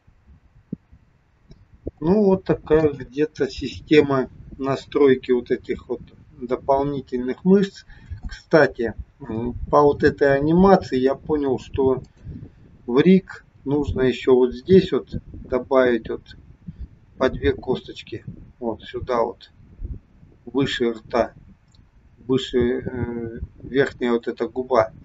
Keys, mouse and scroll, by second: 1.2-1.7 scroll down 2, 1.9 shift+middle click, 7.0-7.9 scroll up 4, 8.0 shift+scroll up 1, 8.2 shift+middle click, 12.0 click, 12.8-13.4 scroll up 3.